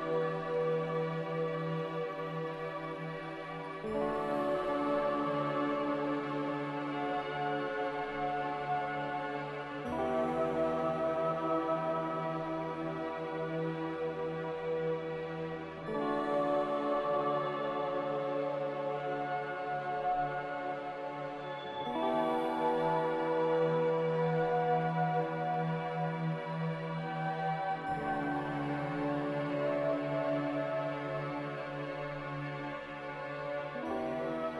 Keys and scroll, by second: 5.2 ctrl+v, 7.3 ctrl+v, 9.5 ctrl+v, 10.9 ctrl+v, 15.1 ctrl+v, 21.7 ctrl+c, 22.4 ctrl+v, 26.5 z, 27.6 a, 29.1 z, 33.1 2, 33.6 Return.